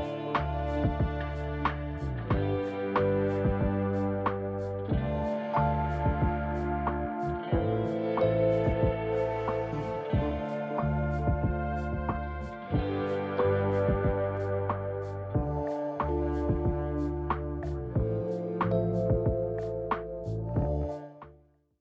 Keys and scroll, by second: 10.5-11.3 typing, 14.0 space, 14.2 c.